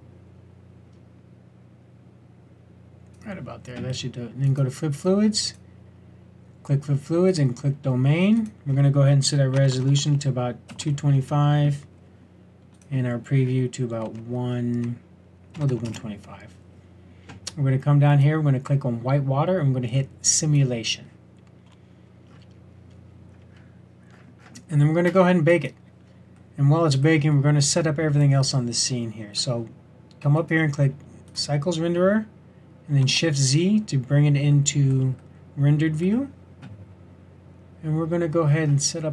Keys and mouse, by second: 4.4-7.2 drag, 8.3-9.7 drag, 9.7 KP_2, 18.0-22.2 drag, 22.2-24.1 middle drag, 24.8-25.4 middle drag, 25.4 click, 33.0 shift+z.